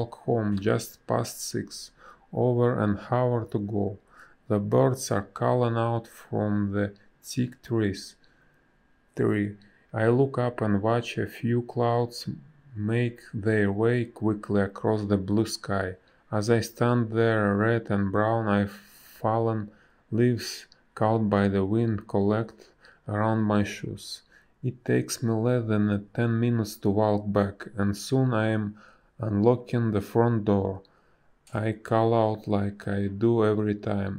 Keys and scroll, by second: 5.6 space, 22.4 space, 26.7 space, 27.7 b, 29.8 space, 33.6 ctrl+a.